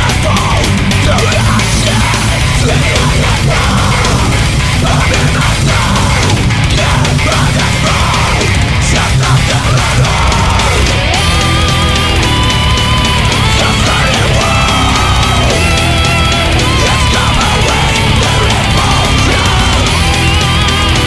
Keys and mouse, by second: 2.2 space, 3.1 ctrl+z, 3.6 ctrl+z, 6.1 ctrl+z, 8.0 ctrl+z, 9.3 ctrl+s, 12.1 ctrl+z, 13.9 ctrl+z, 15.3 right click, 16.0 ctrl+z, 16.4 right click, 18.4 right click, 18.9 ctrl+z, 19.4 ctrl+z, 19.8 right click, 20.0 right click.